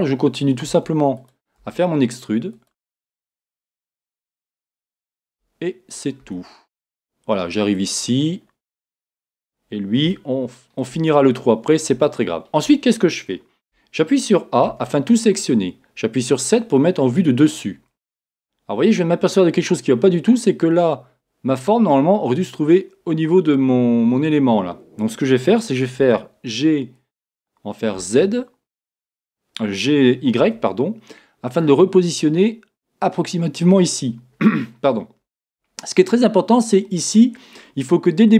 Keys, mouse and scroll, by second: 8.2-9.0 scroll down 2, 9.0-10.1 scroll down 1, 10.1-36.0 shift+middle drag, 11.1-11.6 scroll up 3, 11.6-12.1 scroll down 2, 16.3 KP_7, 26.3 g, 36.0-37.5 scroll up 2, 37.5-38.3 scroll up 1.